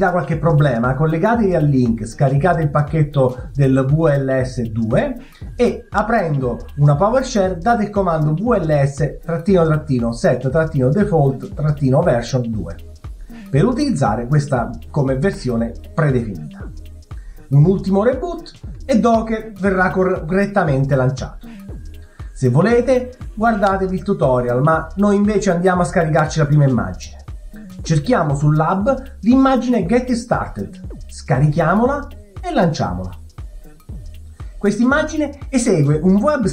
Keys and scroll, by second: 2.6 BackSpace, 2.6 e, 2.7 w, 2.8 e, 3.9 Return, 3.9 Down, 4.8-10.3 typing, 11.0 Return.